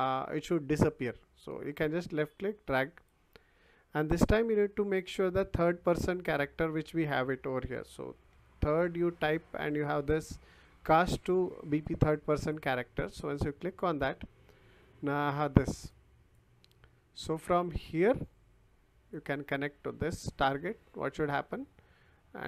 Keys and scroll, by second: 5.7 t, 6.0 h, 7.7 i, 8.3 r.